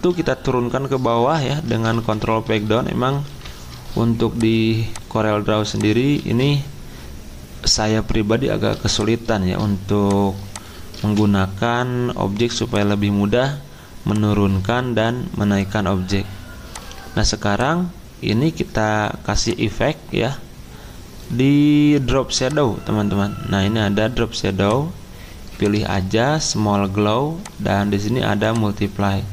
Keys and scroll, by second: 1.8 ctrl+Page_Down, 2.0 ctrl+Page_Down, 2.2 ctrl+Page_Down, 2.4 ctrl+Page_Down, 6.2 ctrl+z, 11.0 ctrl+z.